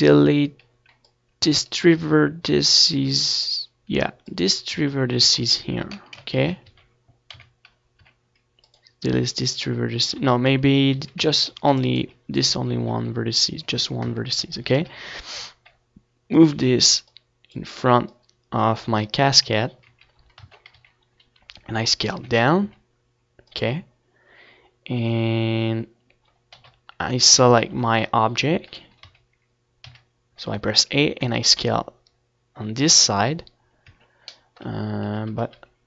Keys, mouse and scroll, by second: 0.7 Tab, 1.2 Tab, 2.0 ctrl+z, 2.3 ctrl+z, 2.6 a, 3.0 c, 3.8-5.8 right drag, 3.9 x, 4.6 Tab, 5.4 Tab, 5.8-6.8 middle drag, 6.1 Tab, 6.8 KP_1, 9.1-12.0 drag, 11.6 KP_3, 12.1 z, 12.3-14.5 middle drag, 12.6 Tab, 13.0 a, 14.5 e, 14.8 click, 14.9 s, 19.2 KP_1, 20.2 KP_Decimal, 21.8 a, 22.5 a, 23.9 e, 26.1-27.2 drag, 26.8 Tab, 28.0 KP_1, 28.4 KP_3, 29.5 middle click, 30.3 Tab, 30.6 z, 30.8 a, 31.3 c.